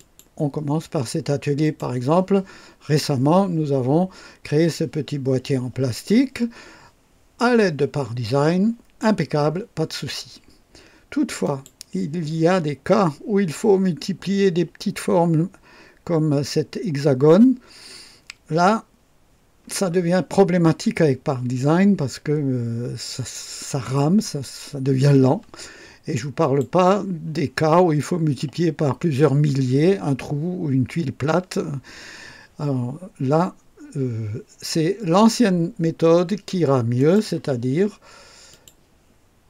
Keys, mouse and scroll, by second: 0.0 click, 1.6 click, 11.4 click, 26.4 click, 37.0 click, 38.5 click.